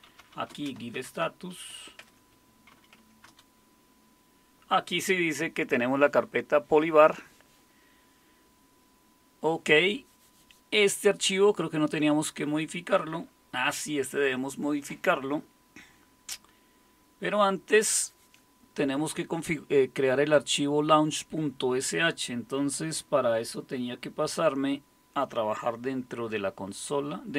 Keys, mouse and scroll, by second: 0.0-3.2 typing, 2.0 Tab, 3.3 Return.